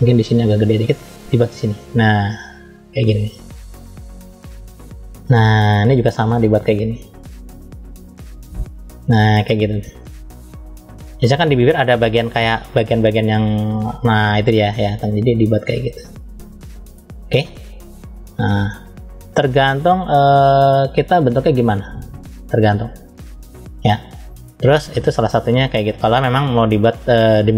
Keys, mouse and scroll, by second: 0.9 click, 6.3 click, 12.0 click, 14.8 click, 16.1 click, 18.6 click, 24.0-24.5 scroll down 1, 24.5-25.6 middle drag, 26.4-27.5 middle drag.